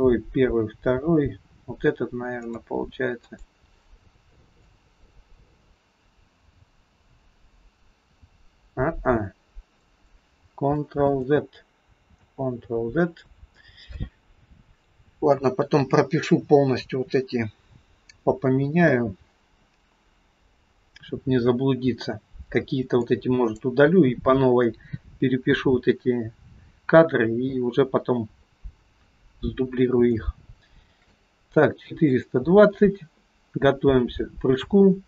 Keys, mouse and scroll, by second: 3.3 click, 4.7 click, 11.0 ctrl+z, 12.2 ctrl+z, 22.2-23.1 scroll down 2, 23.1 click, 29.8-30.2 scroll down 2, 30.2 middle click, 32.2 click.